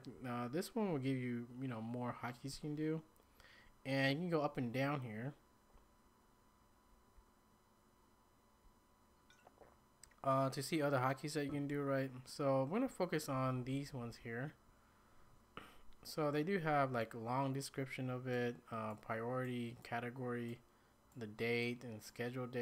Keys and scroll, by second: 4.9 Down, 5.0 Down, 5.5 Down, 5.6 Down, 5.7 Down, 6.0 Up, 6.5 Up, 6.6 Up, 6.7 Up, 6.8 Up, 6.9 Up, 7.2-7.7 Down, 7.2-7.7 Up, 8.2 Down, 11.7 Up, 12.2-12.8 Up, 13.3 Up, 13.5 Up, 13.7 Up, 13.9 Up, 14.1 Up.